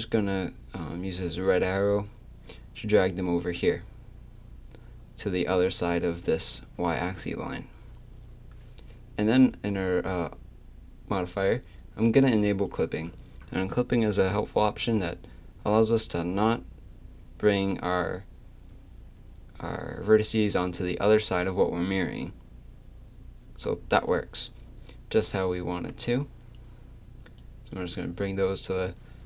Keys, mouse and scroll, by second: 12.7-14.6 drag, 16.2-18.2 drag, 27.4-29.2 drag.